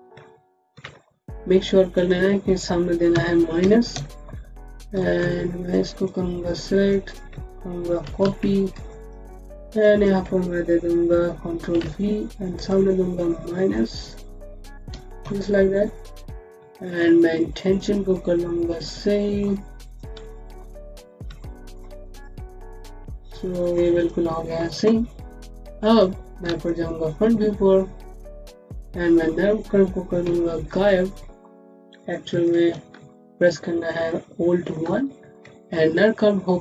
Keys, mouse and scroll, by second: 0.6 ctrl+v, 1.8 click, 3.0 Left, 3.5 KP_Subtract, 3.8 KP_Enter, 4.8 alt+middle click, 5.6 click, 7.9 ctrl+c, 8.1 ctrl+c, 8.7 click, 11.6 ctrl+v, 12.4 click, 14.7 KP_Subtract, 15.1 KP_Enter, 16.2-16.5 scroll up 1, 16.6 alt+middle click, 17.2 click, 18.0 middle click, 19.7 click, 20.1 alt+middle click, 20.2-23.6 typing, 20.5 scroll down 1, 20.6-21.2 scroll up 1, 21.3 middle click, 21.9 click, 22.9 middle click, 23.8 click, 24.1 scroll down 1, 25.8 click, 26.4 space, 26.5 click, 26.8 space, 28.0-28.4 scroll down 1, 28.6 alt+middle click, 29.4 scroll up 1, 30.6 alt+2, 32.8 alt+2, 34.7 alt+1.